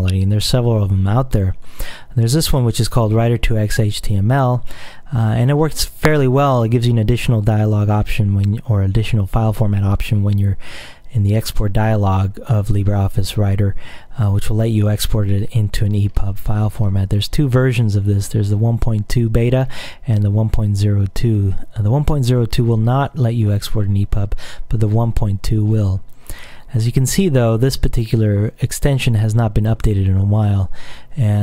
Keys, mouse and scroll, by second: 5.4-5.9 scroll down 2, 6.3-7.0 scroll up 2, 15.7-18.5 scroll down 2, 18.5-19.0 scroll up 2, 19.7-20.2 scroll down 2, 24.2-24.8 scroll up 1, 25.7-27.6 scroll up 3.